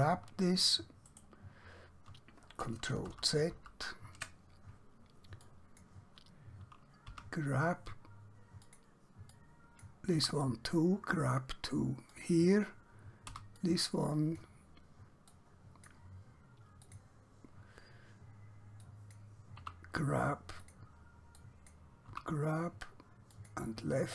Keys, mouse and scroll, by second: 0.0 g, 1.1 right click, 5.5 click, 7.1 g, 8.7 click, 10.2 g, 12.2 click, 13.4 g, 13.6 click, 19.7 g, 20.7 click, 22.2 g, 23.4 click.